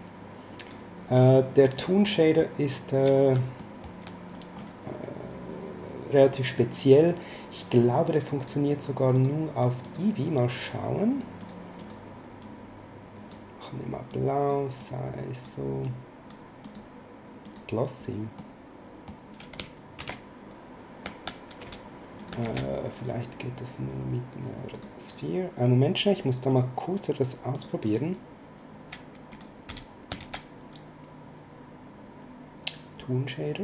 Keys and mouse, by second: 1.7 middle click, 3.5 shift+middle click, 8.4 click, 11.4 click, 14.1 click, 15.8 click, 18.4 middle click, 21.6 x, 22.1 click, 22.4 shift+a, 24.7 click, 26.4 click, 27.5 click, 29.3 click, 29.6 x, 30.1 shift+a.